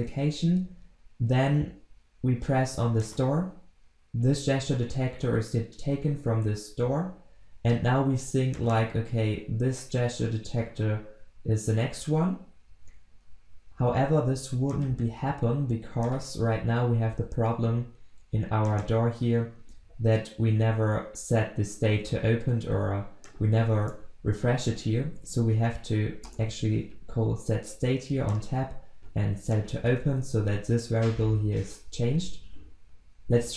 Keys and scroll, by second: 26.3 Return, 29.5 ctrl+x, 29.8 ctrl+v, 30.9 ctrl+s.